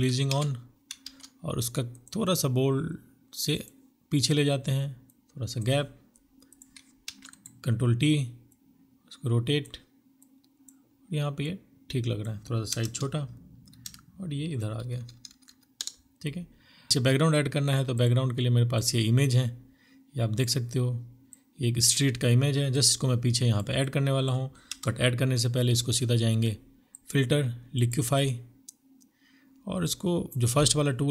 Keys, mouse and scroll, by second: 5.9 ctrl+t, 6.1 right click, 10.9 Return, 11.6 Return, 12.0 Up, 12.7 Right, 13.7 Down, 13.9 Down, 14.0 Down, 14.1 Down, 14.3 Down, 14.7 Right, 15.9 right click, 16.5 alt+l, 18.7 space, 23.5 Return.